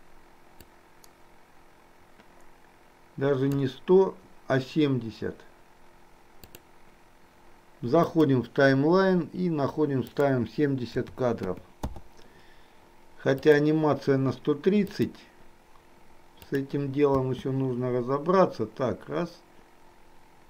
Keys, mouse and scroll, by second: 0.8-3.7 drag, 6.5-8.2 drag, 10.2-12.0 drag, 13.4 click, 13.9 click, 14.9-16.7 drag, 17.2 space.